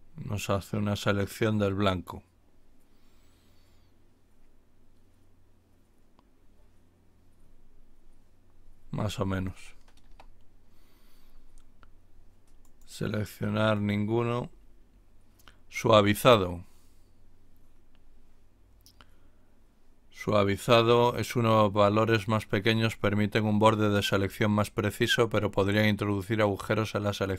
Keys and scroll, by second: 10.0 Return.